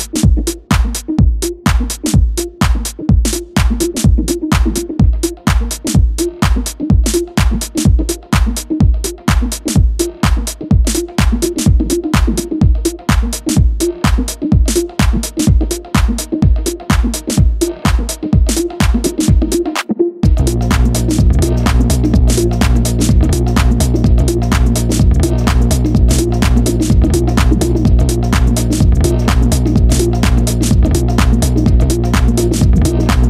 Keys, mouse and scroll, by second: 2.5 click, 3.3 click, 4.2-6.1 right drag, 6.1 click, 9.7 click, 10.6-13.6 drag, 13.8-15.2 drag, 17.4 click, 19.1-22.1 drag, 31.4 click.